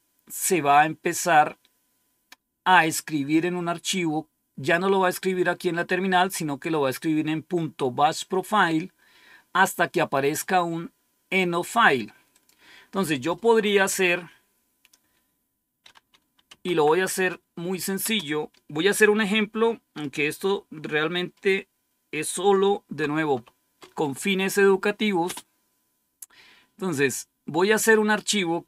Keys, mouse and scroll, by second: 12.3 click, 16.1-17.9 typing, 23.3 typing, 25.2 typing.